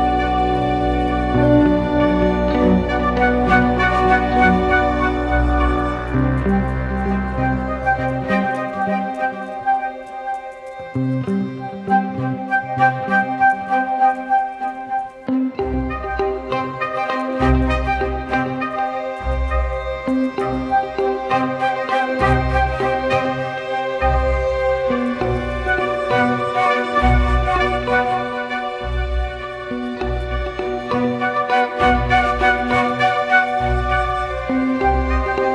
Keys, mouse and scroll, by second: 1.4 ctrl+t, 3.8 ctrl+z, 10.4 Return, 12.0 ctrl+t, 15.4 Return, 16.7 ctrl+t, 18.2 Return, 22.4 ctrl+t, 22.9 alt+shift+click, 24.7 Return, 25.6 Return, 25.8 ctrl+t, 27.2-27.7 Up, 27.8 Return, 30.4-31.7 scroll up 1, 32.6 double click.